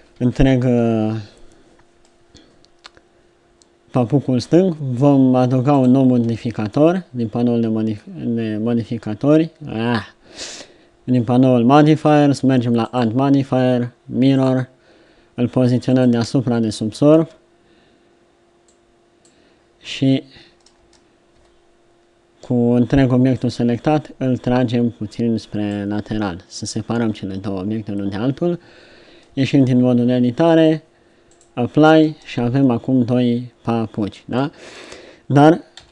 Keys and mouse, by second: 0.0 a, 0.2 a, 0.7 a, 4.5 Tab, 5.8-7.6 drag, 14.5 click, 15.8-17.8 drag, 18.7 click, 20.8 Tab, 21.3 a, 23.3-25.2 drag, 28.7 Tab, 29.2 Tab, 32.0 Tab, 33.8 Tab, 34.1 Tab, 35.7 z.